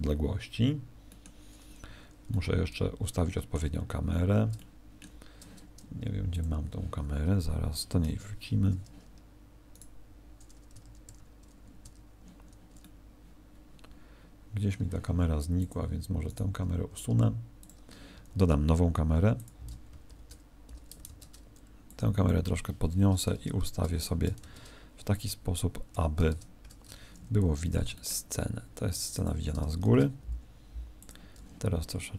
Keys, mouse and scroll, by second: 1.0 middle click, 1.8 Escape, 2.3 middle click, 3.7-4.5 scroll down 13, 4.5 shift+middle click, 6.3 click, 8.0 KP_0, 9.7 right click, 10.7 1, 11.0 2, 11.8 1, 12.7 middle click, 15.5 click, 16.2 right click, 20.0 alt+r, 21.0 ctrl+space, 21.8 click, 23.3 space, 24.3 ctrl+space, 26.5 ctrl+KP_0, 27.7 g, 29.2 click, 29.8 shift+f, 31.0 click, 31.3 g.